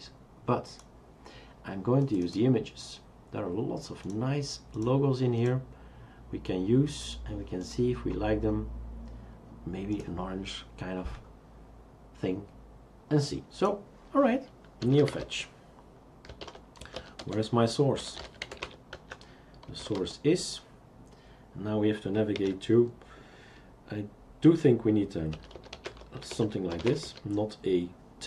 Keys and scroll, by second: 14.6-20.7 typing, 22.4 typing, 25.1-27.6 typing.